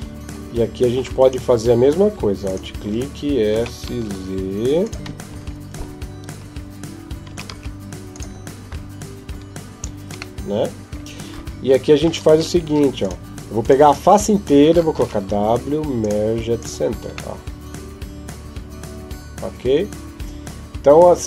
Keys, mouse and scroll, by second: 1.0 right click, 2.3 alt+right click, 3.4 s, 5.1 KP_1, 7.1 s, 8.5 KP_5, 9.1 KP_5, 10.2 middle click, 12.1 ctrl+Tab, 13.4 right click, 14.8 w, 17.1 middle click.